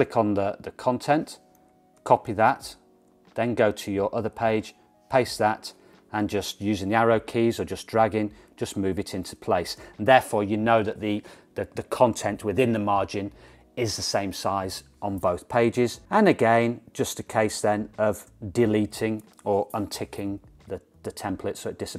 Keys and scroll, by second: 2.1 super+c, 4.7 super+v, 6.4 Right, 6.7 Right, 7.4 Right, 7.7 Right, 8.3 Right, 8.4 Right, 8.7 Right, 9.0 Right, 9.3-9.9 Right, 18.4 BackSpace.